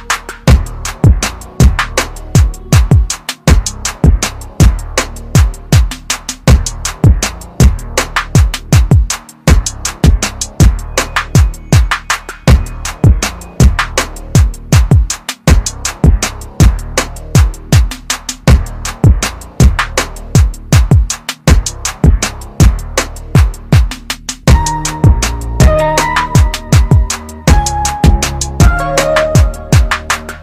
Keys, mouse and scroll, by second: 20.0 Delete, 20.9 click, 24.0 Delete, 24.8 click, 27.3 Delete, 28.1 click.